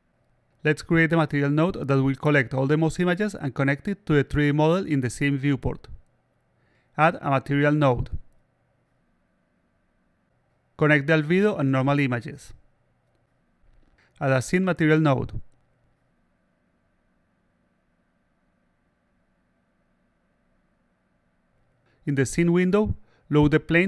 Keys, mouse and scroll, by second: 7.7 click, 8.7-10.2 drag, 11.3-12.3 drag, 13.0 click, 14.3 click, 15.9 click, 18.2-18.9 alt+drag, 21.9 click, 22.9 click, 23.7 click.